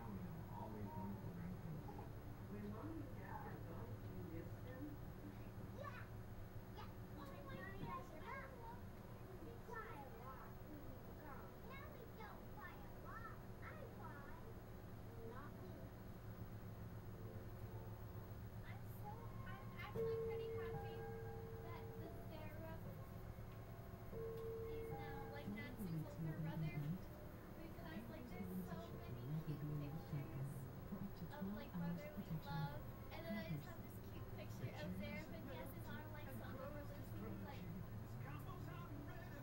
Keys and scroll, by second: 36.6 Up, 37.4 Up.